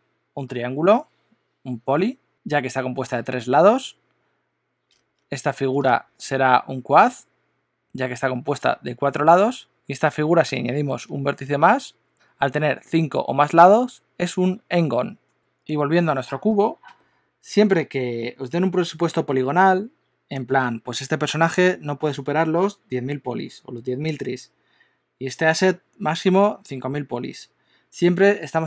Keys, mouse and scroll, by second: 9.7 alt+d, 9.7 super+z, 11.1 alt+d, 15.4 Tab.